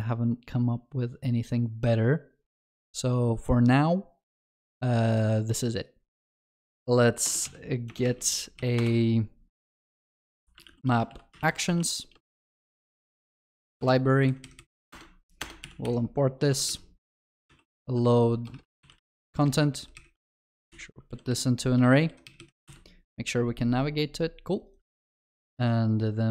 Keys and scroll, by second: 13.8 Return, 14.9 alt+Return, 22.7 ctrl+b, 23.7 ctrl+alt+Left, 25.3 ctrl+c.